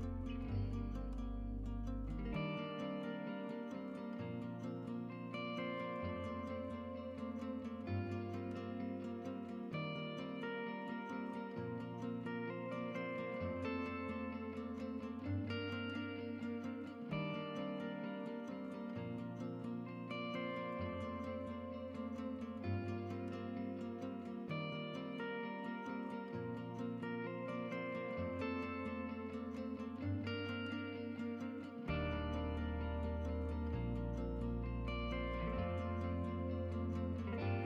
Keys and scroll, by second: 0.0-0.4 typing, 1.9-2.9 typing, 12.3 shift+Tab, 12.9 shift+Tab, 22.4-23.3 typing, 24.6-25.7 typing.